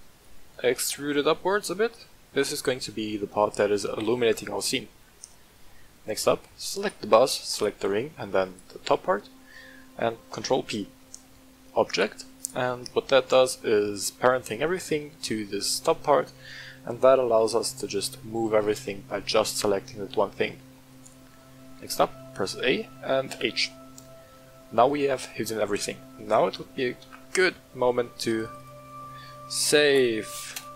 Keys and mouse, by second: 0.1 click, 0.8 e, 2.3 click, 4.1 Tab, 5.4-6.0 middle drag, 6.7 right click, 7.5 shift+click, 8.0 middle click, 8.4 shift+click, 10.3 ctrl+p, 11.9 click, 12.3 click, 13.1-13.9 middle drag, 14.7-15.1 middle drag, 17.2 g, 20.9 right click, 21.7 a, 22.2-22.6 middle drag, 23.3 h, 23.9-25.0 middle drag, 27.1 ctrl+s.